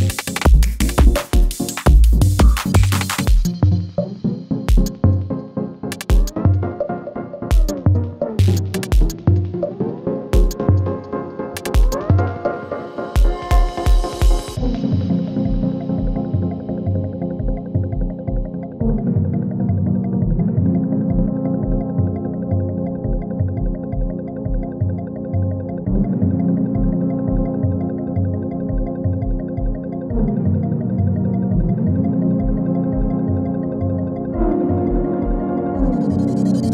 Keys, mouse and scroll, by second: 1.0-1.6 click, 2.0 scroll down 1, 2.8 click, 3.6 ctrl+v, 5.0 space, 7.0-7.7 drag, 11.0 ctrl+v, 11.4-12.5 scroll down 1, 12.5 click, 13.2 ctrl+v, 13.6-14.5 scroll down 1, 14.5 click, 15.1 ctrl+v, 15.6-16.4 scroll down 1, 16.4 click, 17.0 ctrl+v, 18.0 click, 18.7 ctrl+v, 19.0-20.6 scroll down 1, 20.6 click, 21.1 ctrl+v, 21.4-22.3 scroll down 1, 22.3 click, 22.7 ctrl+v, 23.4 space, 25.9 click, 26.6 u, 27.4-27.9 scroll down 1, 29.2-31.4 drag, 32.3 F9, 33.8-36.0 drag.